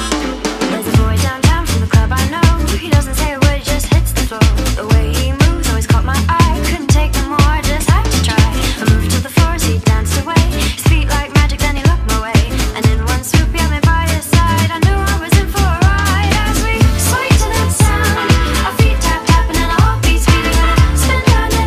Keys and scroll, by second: 1.7 space, 5.2 space, 11.2 space, 12.1 space, 12.4 space, 13.6 space, 16.6 space.